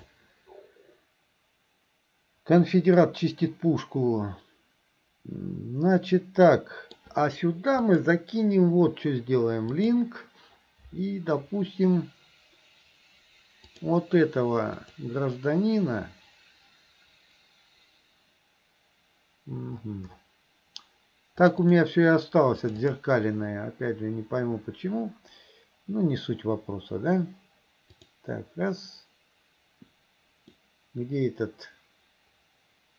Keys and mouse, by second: 3.1-7.0 middle drag, 7.8-10.3 right drag, 28.0 right click, 30.6-32.9 middle drag.